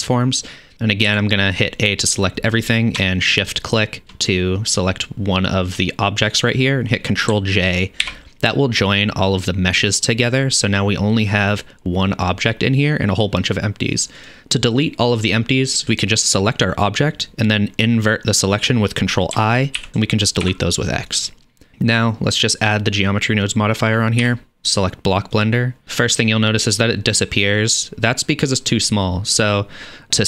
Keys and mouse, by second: 1.1 a, 8.1 ctrl+j, 16.2 click, 19.8 ctrl+i, 20.4 x, 23.1-30.2 drag.